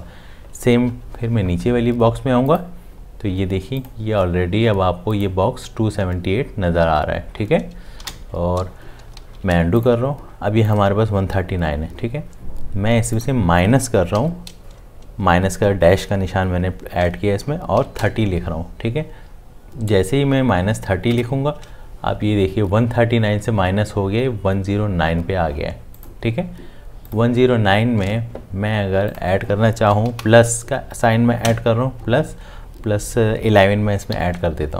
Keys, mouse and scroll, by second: 8.0 ctrl+z, 9.2 ctrl+z, 14.1 -, 17.5-18.5 typing, 21.1 Tab, 30.1 Left, 34.1 1.